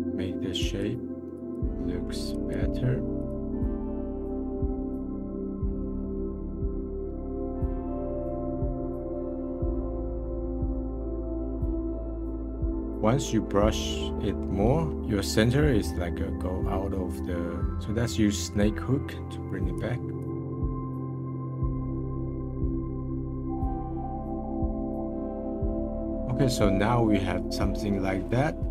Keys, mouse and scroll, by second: 0.6-1.9 drag, 1.9-2.3 middle drag, 2.3-3.6 drag, 3.6 middle click, 3.7 click, 3.9 middle click, 4.0 click, 4.6 middle click, 4.8 click, 5.0-5.4 scroll down 7, 5.1 click, 5.5 scroll up 5, 5.6-5.9 drag, 5.9 scroll down 1, 6.0 middle click, 6.2-6.5 drag, 6.5 scroll up 4, 6.7 f, 6.8 click, 7.2 scroll down 2, 7.3 middle click, 7.6 scroll up 1, 7.7-8.3 drag, 8.3 click, 9.1 middle click, 9.2 click, 9.3 middle click, 9.9 click, 10.1 middle click, 10.3 click, 10.5 middle click, 10.6 click, 10.7 middle click, 10.8-11.2 drag, 11.2 middle drag, 11.3 click, 11.4 middle click, 11.8 middle click, 12.3 click, 12.4 scroll down 3, 12.5 f, 12.6 f, 12.7 click, 12.8-14.4 middle drag, 14.4 scroll down 1, 14.9-17.7 middle drag, 19.7-21.0 drag, 21.0 ctrl+z, 21.0 scroll up 1, 21.2 f, 21.4-22.6 drag, 22.6 f, 22.7 click, 23.1 f, 23.2 f, 23.2-24.6 drag, 24.6 scroll down 3, 24.7 scroll up 1, 24.9-26.1 drag, 26.1 scroll down 2, 28.0-28.7 middle drag.